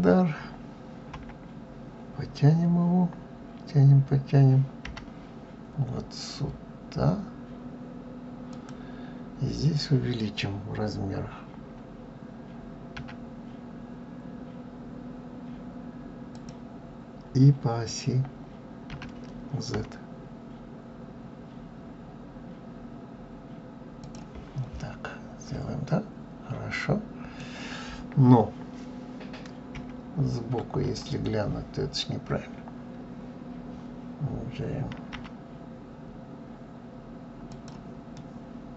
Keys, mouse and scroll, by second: 0.9 KP_1, 24.5-25.0 scroll up 1, 25.0-25.6 scroll up 5, 25.6-28.6 middle drag, 29.5 KP_1, 37.9-38.7 middle drag.